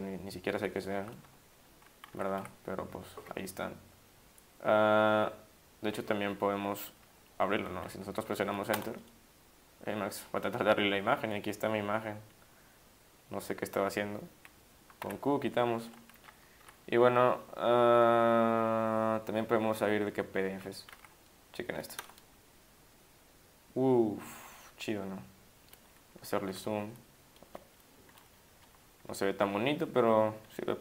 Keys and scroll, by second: 2.1 Down, 2.4 Up, 8.7 Return, 14.8-15.6 typing, 16.6 Down, 16.8 Down, 16.9 Down, 17.0 Down, 19.1 Down, 19.6 Down, 19.7-20.6 Down, 20.9 Up, 22.0 Return, 26.5 ±, 29.0 =, 29.2 -, 29.5 -, 29.7 -.